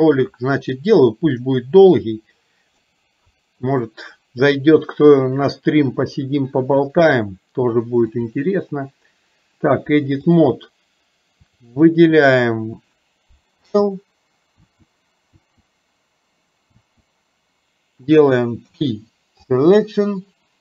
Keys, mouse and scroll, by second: 1.4-2.9 middle drag, 8.2-10.8 drag, 11.5 click.